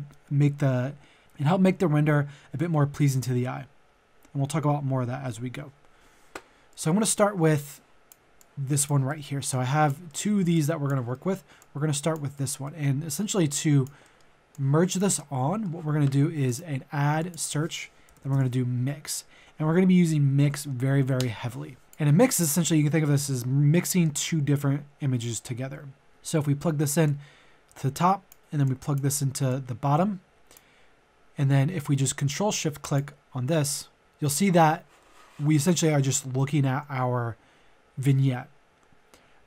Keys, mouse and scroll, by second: 7.5 click, 9.1 middle click, 9.5 click, 10.0 middle click, 10.5 click, 11.1 middle click, 11.5 click, 12.3 middle click, 13.5 click, 14.0 middle click, 14.5 click, 15.2 middle click, 16.4 click, 18.0 typing, 21.2 Return, 21.8-30.7 drag, 34.0 middle click.